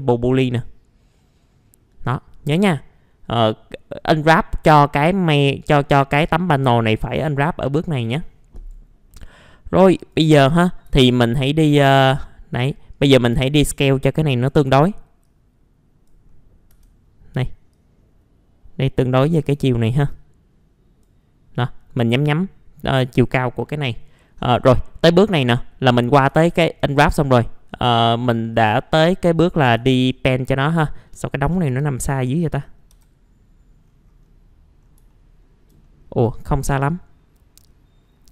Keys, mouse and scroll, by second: 1.2 middle click, 1.5-3.9 scroll down 1, 4.8 click, 5.8 middle click, 6.3-7.3 scroll down 1, 7.3 middle click, 7.6-8.0 scroll down 1, 8.0 middle click, 8.5 right click, 9.5 scroll up 1, 9.9-12.7 drag, 10.9 w, 12.7 middle click, 13.1 scroll up 1, 13.3 r, 13.8-16.2 drag, 14.6 w, 16.2-16.7 scroll up 1, 17.7-19.5 drag, 19.5 w, 20.1 click, 23.3-23.6 scroll down 1, 23.6 middle click, 26.4 alt+middle click, 27.1-28.5 scroll down 1, 28.5 click, 29.9 ctrl+z, 30.2 click, 31.0 middle click, 31.2-32.9 typing, 31.8-32.2 scroll down 1, 32.6 middle click, 33.8-34.3 scroll down 1, 34.7 scroll up 1, 35.1 alt+middle click, 35.8 middle click, 36.2 click.